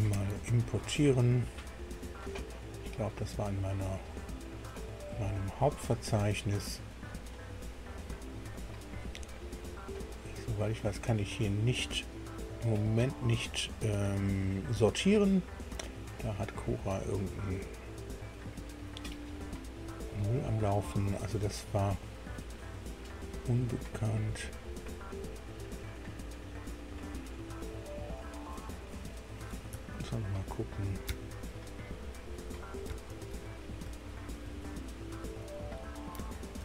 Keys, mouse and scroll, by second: 0.1 ctrl+o, 4.8 click, 10.7 click, 11.7 click, 13.4 click, 15.8-20.3 drag, 21.6 scroll down 2, 22.1 scroll up 2, 25.6-26.3 scroll down 4, 29.8 alt+Tab, 33.2 alt+Tab, 33.9 alt+Tab, 34.5 alt+Tab, 35.3 Tab.